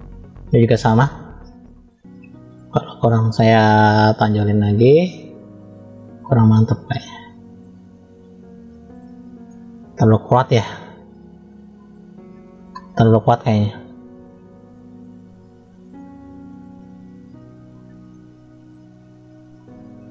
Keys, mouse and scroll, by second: 0.2 scroll up 1, 1.8 shift+middle click, 2.7-3.2 scroll up 1, 3.7 f, 5.7 click, 10.2-12.3 middle drag, 13.5-14.0 drag, 15.8 click, 17.3 click.